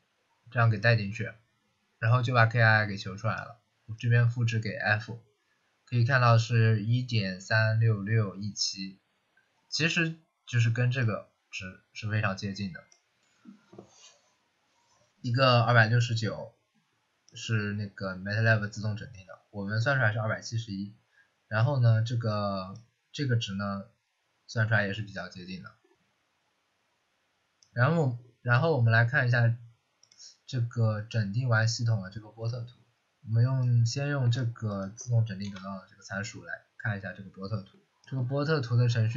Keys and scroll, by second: 35.3 Return.